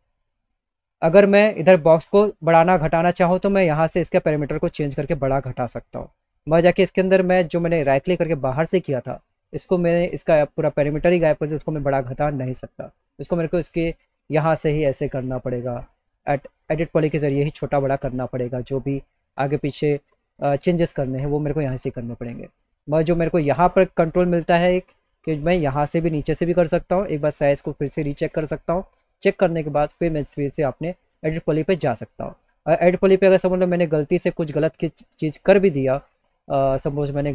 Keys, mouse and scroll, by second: 1.4-2.9 drag, 1.5 right drag, 3.2-4.3 drag, 12.8 click, 13.5 click, 17.2-17.8 drag, 18.2 click, 19.1 click, 21.2 click, 24.7 click, 27.9 click, 30.0 click, 34.0 middle click, 34.5 click, 34.6 middle click.